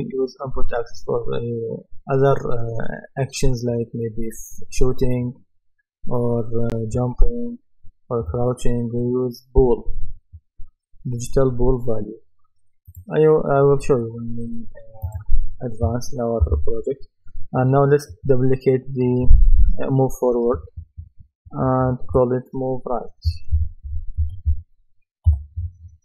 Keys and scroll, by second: 16.4 Right, 20.5 BackSpace, 23.3-25.0 typing, 25.3 Return.